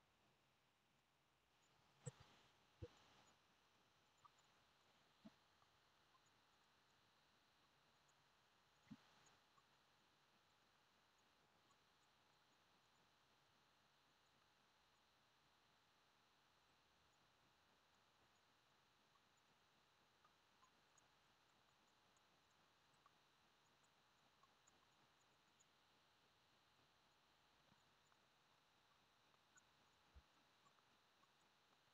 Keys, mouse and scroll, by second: 0.0 1, 0.2 KP_1, 1.0 click, 1.4 g, 1.5 middle click, 1.5 p, 1.6 click, 2.2 Tab, 2.4 middle click, 2.4 Tab, 2.5-5.3 typing, 3.0-3.6 drag, 3.6 middle click, 4.0 click, 4.2 shift+middle click, 4.4 click, 4.8 middle click, 5.2 click, 6.3-13.3 typing, 6.6 click, 6.9 alt+z, 7.0 alt+z, 8.0 click, 8.1 middle click, 8.7 click, 9.4 middle click, 10.1 click, 10.6 click, 11.8-12.9 middle drag, 12.2 ctrl+r, 12.9 click, 13.0-14.1 middle drag, 13.5 alt+z, 14.1-14.9 drag, 14.6 g, 14.9 middle click, 15.4 click, 15.5-16.6 middle drag, 16.6 click, 16.9-19.6 typing, 17.1-18.1 middle drag, 18.1 click, 18.7 middle click, 19.5 click, 19.9 middle click, 20.6 click, 20.7-25.5 typing, 21.0 click, 21.7 drag, 22.3 middle drag, 22.4-22.8 drag, 22.8 middle click, 22.9 click, 23.0-24.4 middle drag, 24.4 click, 24.5 middle click, 24.9 click, 25.2 middle click, 25.3 click, 25.3 middle click, 25.6-27.8 drag, 26.9-28.3 typing, 27.8-29.9 middle drag, 29.6 g, 29.9 click, 30.0 g, 30.3 middle click, 30.6 click, 30.7-31.9 middle drag, 30.8 g.